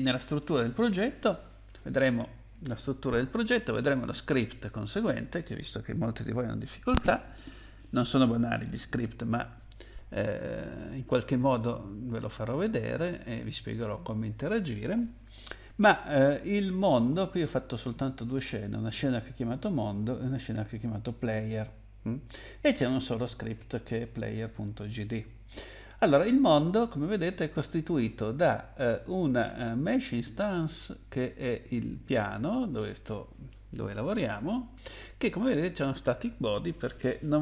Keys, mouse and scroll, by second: 16.8 click, 19.5 click, 23.8 click, 26.2 click, 26.4 click, 29.9 click.